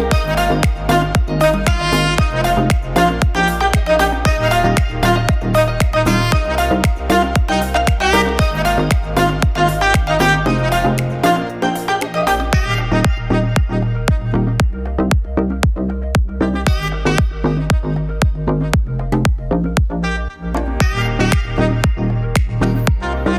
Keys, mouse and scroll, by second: 2.4 Tab, 3.5 click, 5.6 shift+middle click, 6.2 click, 6.5 middle click, 8.1 click, 9.9 shift+middle click, 10.9 middle click, 11.6 Tab, 12.0 shift+middle click, 14.2 l, 15.0 middle click, 15.6 scroll up 1, 15.9 shift+middle click, 16.4 2, 17.7 alt+click, 18.9 shift+middle click, 20.6 shift+middle click, 21.3 ctrl+alt+shift+e, 23.0 l.